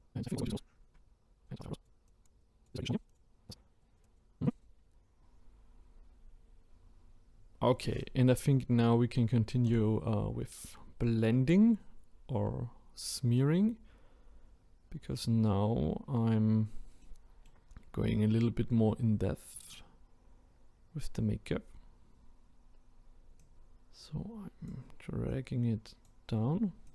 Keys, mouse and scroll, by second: 3.2 click, 4.1 click, 4.7-5.1 scroll down 4, 6.5-8.1 scroll up 6, 9.6-12.8 drag, 16.1-17.0 scroll up 2, 17.0 middle click, 17.7-18.8 scroll down 3, 19.5 click, 21.5-22.1 scroll up 5, 23.4-26.9 drag.